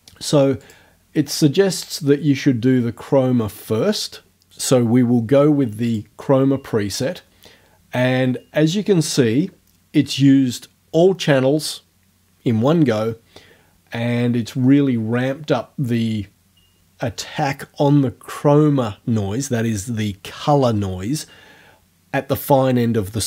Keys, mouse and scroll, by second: 0.6 click, 5.9 click, 8.1 scroll down 2.